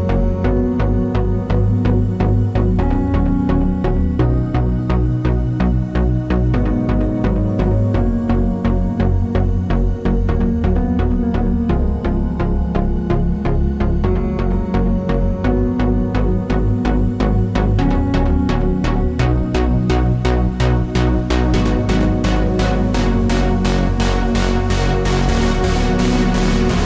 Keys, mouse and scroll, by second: 1.4 shift+a, 1.6 Tab, 1.7 s, 2.6 click, 2.6 middle click, 3.1 scroll, 3.3 z, 3.5-3.8 scroll up 1, 3.8 s, 6.3-8.3 middle drag, 6.5-6.9 scroll down 1, 6.9 scroll, 7.4 scroll, 7.5 Tab, 7.7 s, 8.3 click, 8.9 g, 8.9 click, 9.5 shift+Tab, 10.6-12.3 drag, 10.6-10.9 scroll down 2, 10.9-11.7 scroll up 2, 11.7 alt+d, 12.6 shift+middle click, 13.8 alt+d, 14.2 click, 14.3 shift+middle click, 14.5 scroll up 1, 15.3 click, 15.4 scroll up 1, 15.7 shift+middle click, 16.1 scroll up 1, 17.3 middle click, 17.9 scroll down 1, 18.1 middle click, 18.6 scroll down 1, 18.9 click, 19.0 Tab, 19.2 a, 19.6 shift+n, 19.8 Tab, 19.9 click, 20.5 g, 21.0-23.6 middle drag, 21.0 scroll down 1, 21.7 a, 22.3 Tab, 22.4 a, 22.8 shift+n, 23.3 Tab, 23.6 click, 24.0 scroll up 1, 24.3 shift+middle click, 24.8 click, 25.3 KP_Decimal, 25.8 g, 26.4-26.7 scroll down 2, 26.7 shift+middle click.